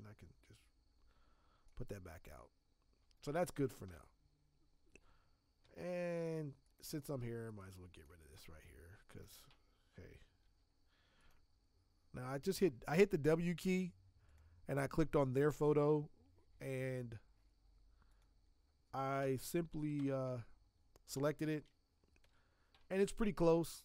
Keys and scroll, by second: 5.6 z, 8.3 space, 10.4 w, 19.2 ctrl+BackSpace, 19.9 alt+BackSpace, 22.2 ctrl+d.